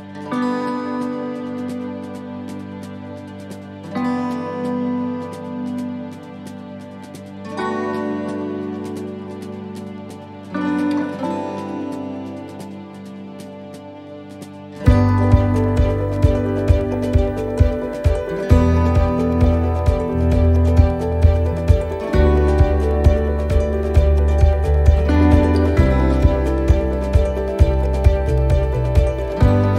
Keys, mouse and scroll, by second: 1.7 shift+middle click, 2.3 middle click, 2.8 scroll down 1, 3.8 shift+right click, 5.1 click, 6.3 middle click, 7.9 s, 10.1 middle click, 11.1 middle click, 12.8-13.3 scroll down 2, 13.4 middle click, 13.6 shift+middle click, 13.6 shift+middle click, 15.0 shift+right click, 18.7 click, 21.9 middle click, 22.2 scroll down 1, 22.6 middle click, 23.0 scroll up 2, 23.8 scroll up 1, 24.3 click.